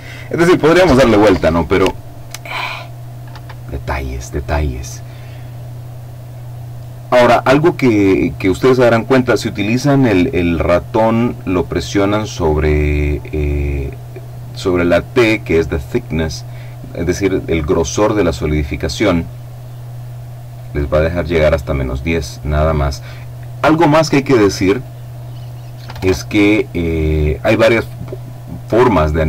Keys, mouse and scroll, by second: 3.1 Escape, 11.1-15.0 drag, 18.8-24.3 drag, 24.5 click, 25.6 0, 25.6 Return.